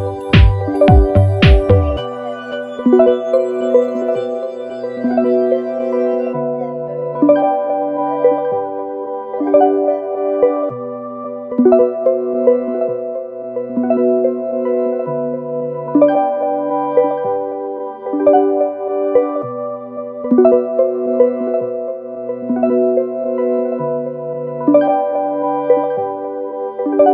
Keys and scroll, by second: 1.5 super+=, 7.9 super+c, 8.5 super+f, 14.5 super+[, 17.5 Left, 17.7 Down, 18.2 Right, 20.7 super+-, 23.1 super+=.